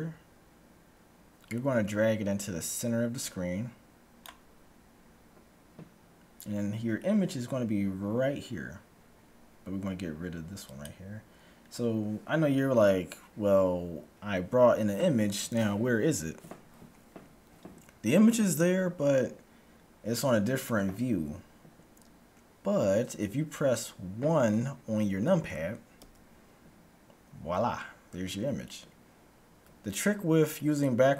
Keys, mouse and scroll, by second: 7.2-9.2 middle drag, 10.8-12.7 drag, 26.0 KP_1.